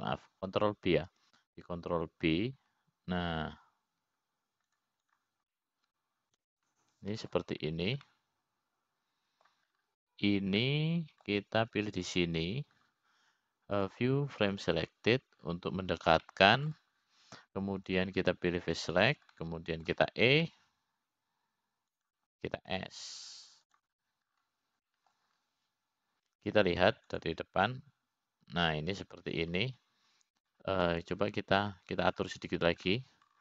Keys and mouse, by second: 1.6 ctrl+g, 3.7 ctrl+b, 7.6 click, 8.0-10.0 middle drag, 10.6-12.1 middle drag, 13.1 middle click, 14.4 click, 16.4 click, 18.8 middle click, 20.5 click, 21.2 click, 21.9 middle click, 23.1 e, 25.3 s, 27.4 middle click.